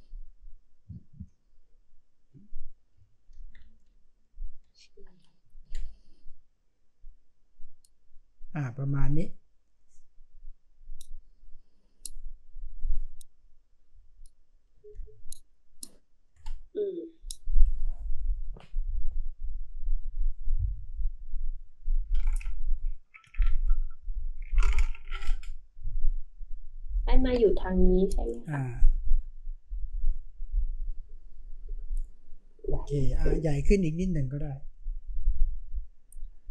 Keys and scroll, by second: 3.3 ctrl+t, 14.9 space.